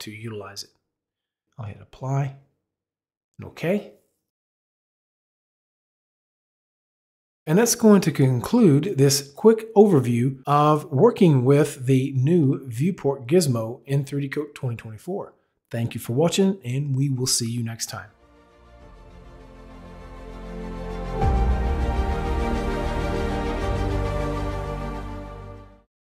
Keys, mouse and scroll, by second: 1.8 click, 2.9 click.